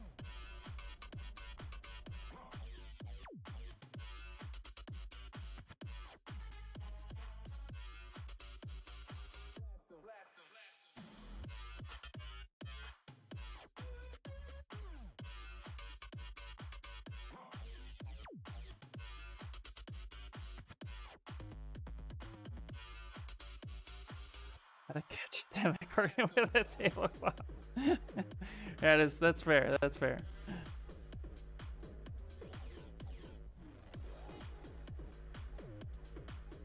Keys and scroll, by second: 26.3 ctrl+z, 26.7 ctrl+z, 29.8 s.